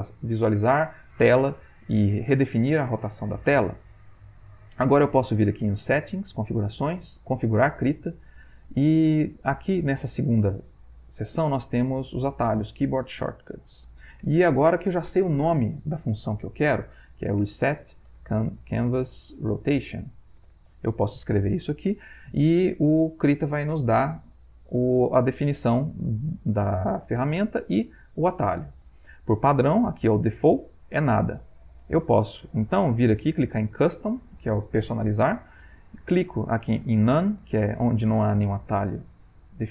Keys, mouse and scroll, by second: 4.8 click, 7.8 click, 13.8 click, 17.1-21.1 typing, 28.7 click, 30.9 click, 33.3 click.